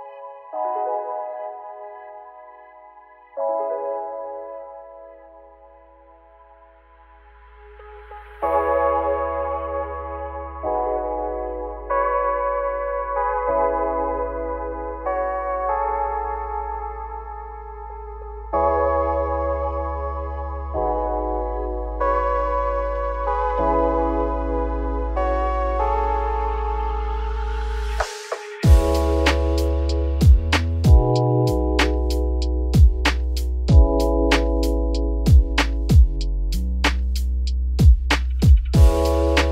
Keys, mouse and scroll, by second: 2.7 Tab, 2.9 click, 3.1 scroll down 1, 3.1-3.5 middle drag, 3.5 ctrl+s, 3.7 scroll down 1, 3.8-6.2 middle drag, 6.2-6.7 scroll up 7, 6.7-7.8 shift+middle drag, 7.8-8.2 scroll down 2, 8.2 shift+middle drag, 8.4-8.7 scroll up 5, 8.7 click, 9.4 `, 10.0 Tab, 10.5-11.6 shift+middle drag, 11.6 click, 11.7 3, 11.9 click, 12.3 shift+s, 12.7 Tab, 13.0 shift+a, 14.3 Tab, 14.5-14.9 scroll up 3, 14.9 r, 17.2 s, 20.0 g, 20.5 Tab, 21.2 g, 26.3 Tab, 26.5 scroll up 2, 26.6 1, 27.0 click, 28.2 click, 29.4 g, 38.3 Tab, 38.6-39.1 scroll down 2, 39.1 scroll up 2, 39.3 middle drag.